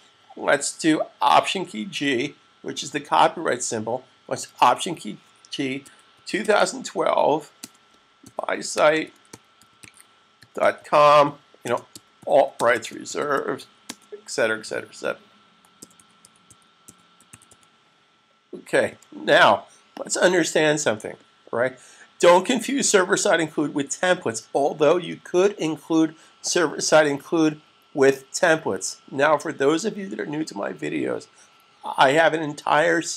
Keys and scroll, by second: 2.4 alt+g, 5.5-6.9 typing, 8.3-13.7 typing, 14.8-17.9 typing, 18.9-19.7 typing, 20.7 typing.